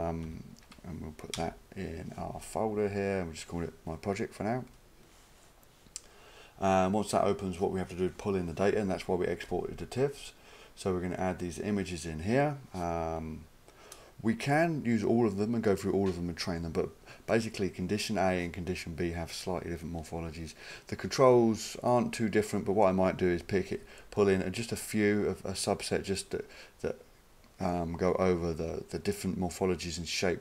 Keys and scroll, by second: 0.2 ctrl+v, 1.4 Return.